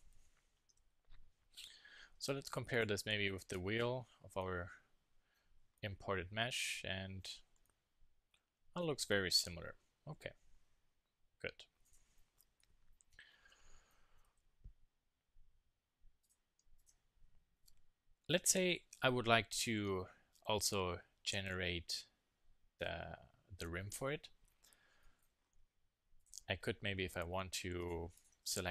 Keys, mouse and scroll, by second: 0.1 KP_1, 0.4 KP_3, 0.7 Tab, 4.1 z, 5.5 z, 7.4 z, 9.5 KP_1, 9.7 KP_3, 10.0 z, 12.6-13.5 middle drag, 13.5 Tab, 13.7-16.2 middle drag, 14.3 z, 17.7 click, 25.0 middle click, 26.2-28.7 drag.